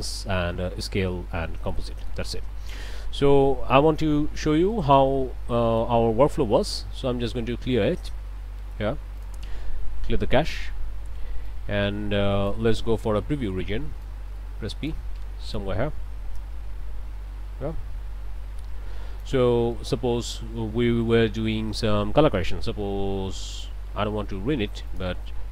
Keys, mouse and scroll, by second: 1.7 click, 4.0-4.6 scroll up 4, 4.7 middle click, 5.6 middle click, 9.2 click, 11.5-12.7 drag, 13.5 p, 14.0-15.1 drag, 15.5-19.4 drag, 19.7 click, 20.5 scroll down 1, 20.8 click, 21.6 scroll up 1, 23.5 click, 24.9 click.